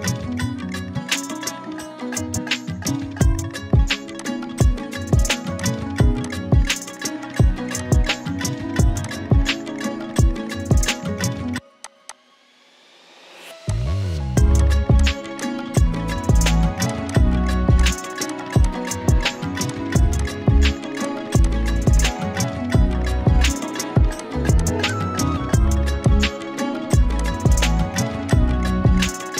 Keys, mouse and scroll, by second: 4.2 click, 6.2 shift+click, 7.2 right click, 7.8 click, 9.0-10.6 alt+drag, 17.5-22.1 typing, 17.8 click, 18.3 click, 18.6-19.5 click, 20.2 click, 21.0 click, 21.4 click, 22.7-24.5 scroll down 1, 28.4 z.